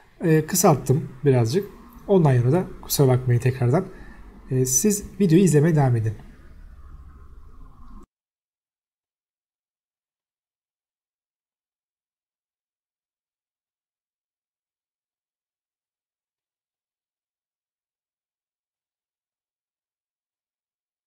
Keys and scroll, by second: 0.0 t, 0.2 space, 0.8 Escape, 1.9 s, 1.9 space, 4.4 Escape, 4.7 s, 4.8 space, 6.1 3, 7.1 Escape, 11.2 s, 11.3 space, 13.9 2, 14.0 Return, 14.7 Escape, 14.9 e, 15.2 space, 15.9 Escape, 17.7 Escape, 18.7 e, 19.0 space, 19.4 Escape, 20.3-21.0 typing.